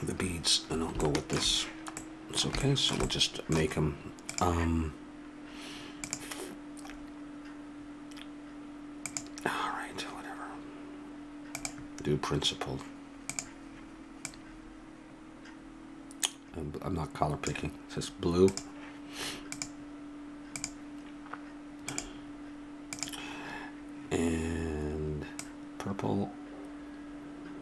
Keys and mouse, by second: 2.2 middle click, 2.8 middle click, 3.2 click, 3.4-5.0 drag, 5.2-8.7 drag, 9.1-12.5 drag, 13.3-23.0 drag.